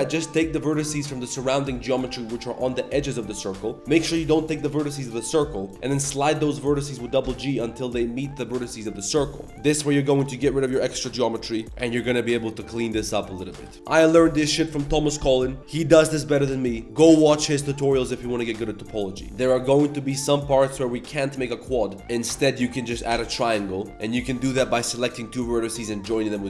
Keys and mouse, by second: 0.4 click, 1.6 click, 1.9 g, 3.0 click, 3.0 right click, 3.5 1, 3.7 g, 3.9 g, 5.7 ctrl+z, 6.0 g, 8.2 click, 9.5 g, 10.0 click, 10.2 g, 10.7 shift+click, 11.5 click, 11.7 g, 12.8 click, 12.8 g, 13.0 g, 13.4 a, 13.5 shift+w, 19.4 click, 19.9 shift+click, 20.7 j, 21.6 click, 21.8 shift+click, 22.1 x, 22.1 1, 22.1 click, 22.4 shift+click, 23.1 j, 24.2 click, 24.7 shift+click, 26.0 j.